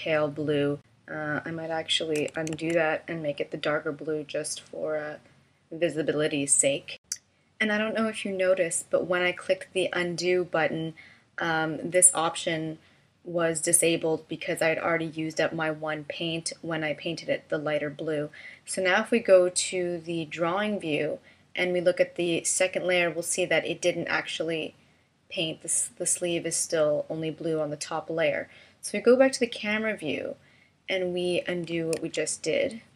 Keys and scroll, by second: 2.7 super+z, 31.9 super+z.